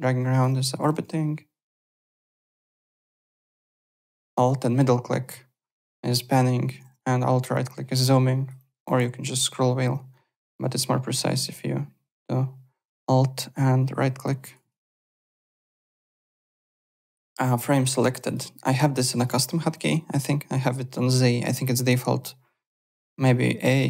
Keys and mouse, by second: 0.9 alt+Tab, 3.3 alt+Tab, 4.3 alt+middle click, 6.1 alt+Tab, 6.7 alt+Tab, 7.2 alt+right click, 8.5 alt+click, 10.1 alt+right click, 14.6 alt+Tab, 15.1 alt+click, 17.3 click, 17.9 alt+middle click, 18.2 click, 18.9 click, 19.1 alt+Tab, 19.7 alt+click.